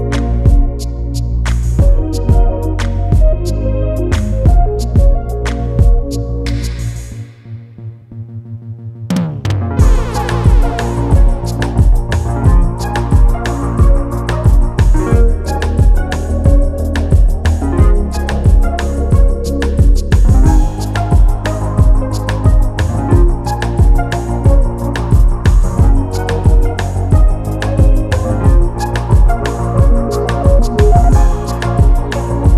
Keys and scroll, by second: 23.6 ctrl+j.